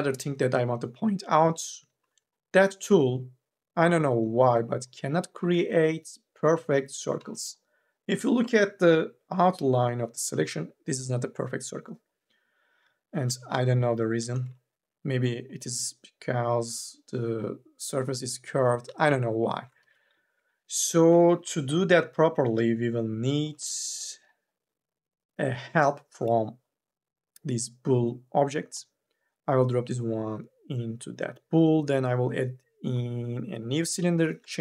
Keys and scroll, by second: 5.7 ctrl+z, 20.0 ctrl+z, 23.3 4, 23.5 e.